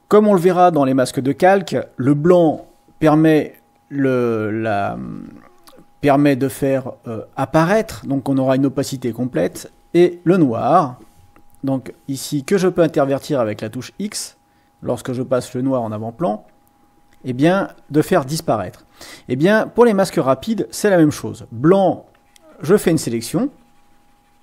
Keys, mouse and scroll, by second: 4.5-6.0 drag, 13.8 x, 16.6-19.2 drag, 20.4 x, 22.0-23.2 drag, 23.8 click.